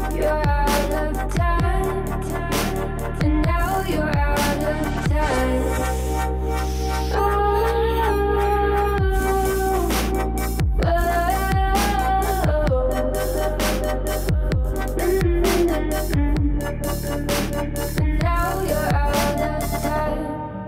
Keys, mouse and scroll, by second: 0.1 shift+d, 1.2 r, 2.2 scroll up 2, 2.5 middle click, 3.1 scroll down 1, 3.3 alt+z, 3.7-4.6 middle drag, 4.6 2, 5.0 alt+click, 5.7 f, 6.7 KP_1, 7.3 alt+z, 7.9-8.5 scroll up 2, 8.5 ctrl+l, 8.9 s, 9.8 1, 10.0 drag, 10.3-11.1 scroll down 2, 11.1 g, 12.3 click, 12.9 g, 13.9 r, 14.4 s, 15.0 alt+z, 15.2 middle click, 15.8 scroll down 2, 16.0 middle click, 16.6 alt+z, 16.9 middle click, 17.3 click, 17.7 KP_1, 17.9 alt+z, 18.0 shift+middle click, 18.4 r, 18.8 g, 19.6 middle click, 20.1 KP_3.